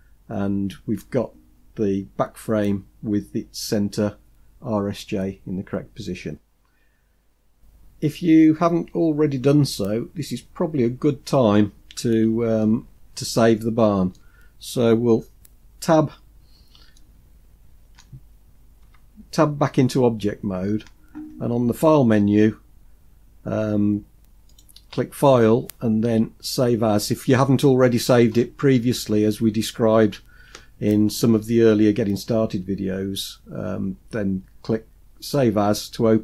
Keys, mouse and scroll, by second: 12.6-14.1 middle drag, 12.6-13.1 scroll up 4, 16.9-18.0 shift+middle drag, 18.8 Tab, 24.5-35.6 drag.